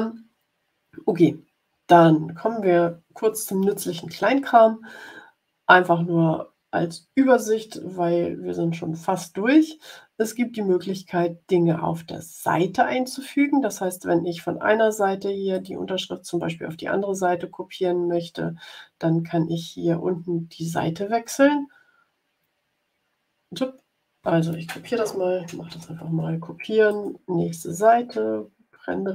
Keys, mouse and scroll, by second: 13.9-14.6 scroll down 4, 15.5 click, 25.6 ctrl+c, 26.8 click, 28.2-29.1 ctrl+scroll down 3.